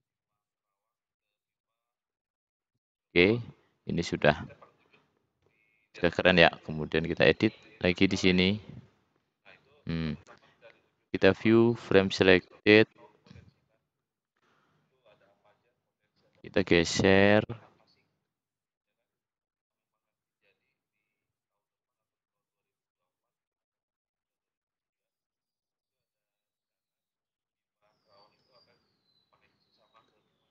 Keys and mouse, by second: 3.2-3.7 drag, 4.1 drag, 9.8 click, 11.1 click, 11.9 middle click, 12.3 middle click, 13.2 middle click, 15.9 click, 21.2 click, 27.6 click.